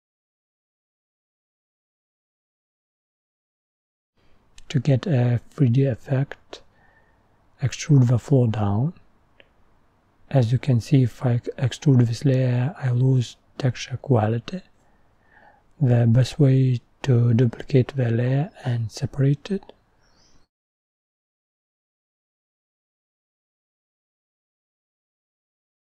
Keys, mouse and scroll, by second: 0.1 click, 1.1 click, 1.3-2.4 scroll up 6, 1.5 middle click, 2.4 click, 2.9-3.3 scroll up 1, 3.3 click, 3.9-4.5 scroll up 18, 4.5 middle click, 5.4 click, 6.0-6.9 scroll down 1, 6.9-7.4 scroll down 1, 7.4-9.1 scroll down 13, 7.5 middle click, 9.1 click, 10.4 middle click, 10.7 scroll down 1, 10.9 middle click, 11.3 e, 22.0-23.2 middle drag, 23.2 Tab, 25.5 middle click.